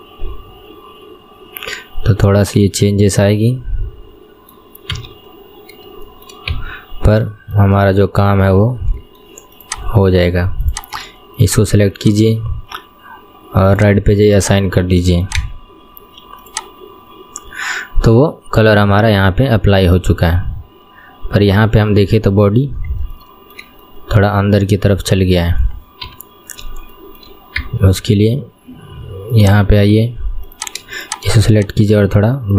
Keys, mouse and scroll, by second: 5.1 KP_3, 5.4-6.2 scroll up 5, 6.2 shift+middle click, 6.6 KP_1, 7.0-7.5 scroll down 4, 7.5-8.8 shift+middle drag, 8.8 scroll down 1, 9.1 shift+middle click, 9.8 click, 10.9 click, 12.1 shift+click, 13.8 click, 14.5-15.4 drag, 15.5 Tab, 15.8-16.6 scroll down 1, 16.6 click, 17.0-18.7 scroll up 4, 18.7-19.7 scroll up 3, 19.7-22.7 middle drag, 22.8-23.2 scroll up 4, 23.2-26.2 shift+middle drag, 26.2 KP_3, 26.5-27.0 scroll up 3, 27.0-27.7 shift+middle drag, 27.7 Tab, 29.6-30.7 drag.